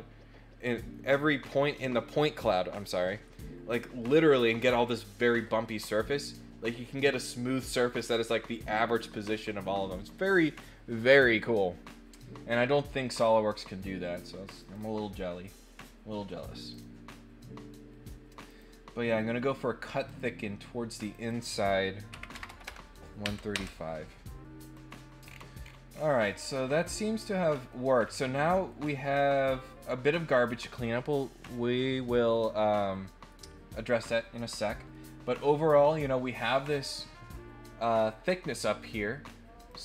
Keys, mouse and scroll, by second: 14.6 click, 16.7 click, 18.5 click, 20.0 click, 21.1 click, 24.6 click, 25.2 scroll down 1, 25.6-26.0 scroll up 3, 26.3-27.7 middle drag, 28.0 scroll up 2, 28.4 middle click, 29.2 middle click, 33.7-34.9 middle drag, 39.5 click.